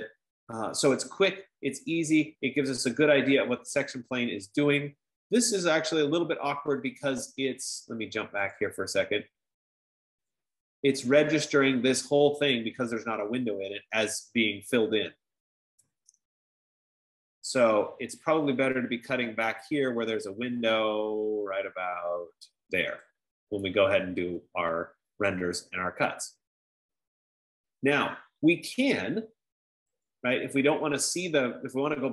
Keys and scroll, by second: 16.3 typing, 20.5-21.3 typing.